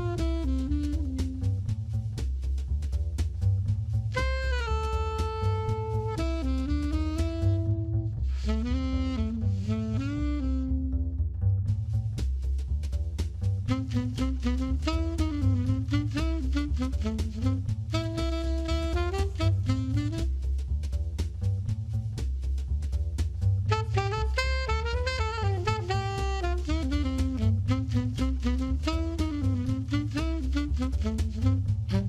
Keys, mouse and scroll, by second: 0.3 click, 1.7 middle click, 4.5 a, 4.8 a, 11.2 click, 14.4 click, 26.6-30.3 scroll down 4.